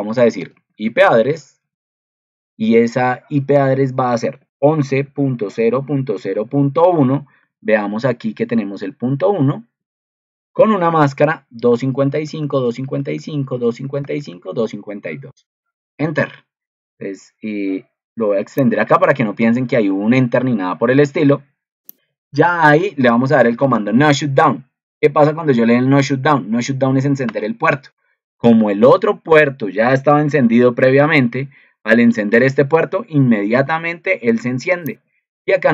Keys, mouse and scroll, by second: 7.4 ctrl+2, 28.9 ctrl+2.